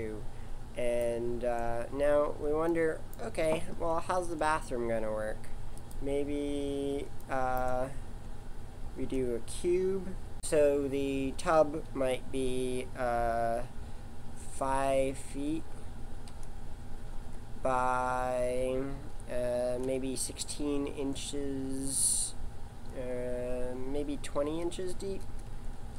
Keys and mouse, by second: 2.1-3.9 middle drag, 3.9 shift+a, 24.8 BackSpace.